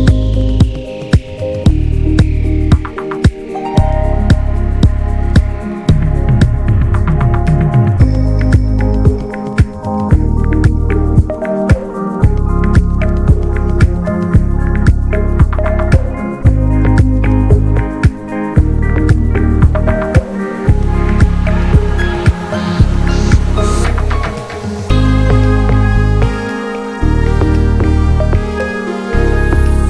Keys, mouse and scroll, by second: 1.6-2.6 scroll up 3, 1.7 alt+z, 1.9 shift+middle click, 2.6 click, 3.8 ctrl+z, 4.4 ctrl+z, 4.7-5.9 middle drag, 5.9 l, 6.5 alt+middle click, 7.2 shift+middle click, 8.0 r, 9.2-11.3 drag, 11.9 alt+z, 12.1 scroll down 3, 12.3 middle click, 13.0 Tab, 13.1 drag, 13.3 scroll down 1, 13.5 middle click, 13.8 click, 14.0-15.1 shift+middle drag, 15.1 click, 15.4 ctrl+a, 16.0 drag, 16.3-16.7 middle drag, 16.7 ctrl+s, 16.9 ctrl+click, 17.1-18.4 middle drag, 18.4 scroll up 1, 18.6-19.7 middle drag, 19.7 ctrl+s, 19.9 click, 20.3 ctrl+a, 20.8 drag, 21.0-26.6 middle drag, 26.6-27.1 scroll up 2, 26.8 shift+middle click, 27.1-27.8 middle drag, 27.8 scroll down 2, 28.0-28.6 shift+middle drag, 28.6 ctrl+s.